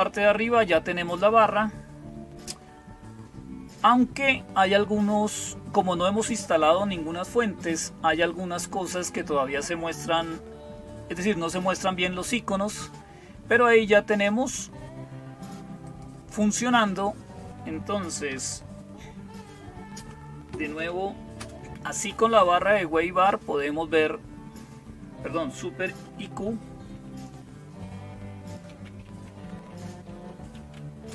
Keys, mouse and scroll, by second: 0.0-31.1 typing.